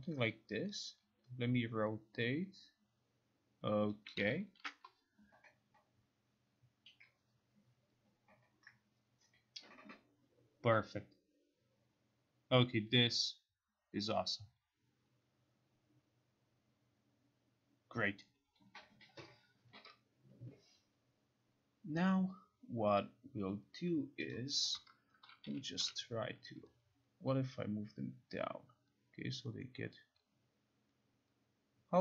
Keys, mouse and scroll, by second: 4.2 click, 4.7 ctrl+r, 24.4 click, 25.3-26.4 typing.